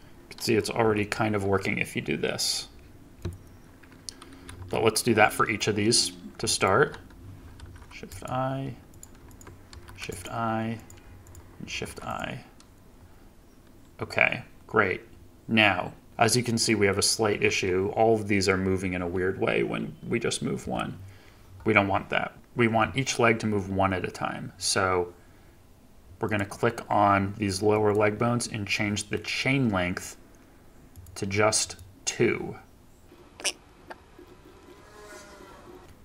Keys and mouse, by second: 0.7 g, 4.4 ctrl+z, 4.9 middle click, 5.8 click, 7.5 shift+i, 10.7 drag, 11.2 shift+click, 16.1 click, 16.6 click, 17.2 g, 20.5 Escape, 27.6 click, 29.1 click, 30.8 click, 34.1-36.0 drag.